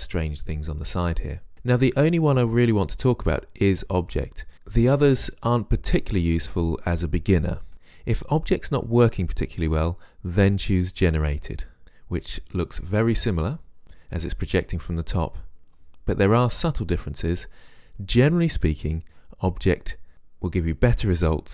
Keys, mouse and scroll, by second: 11.1 click, 19.2 right click.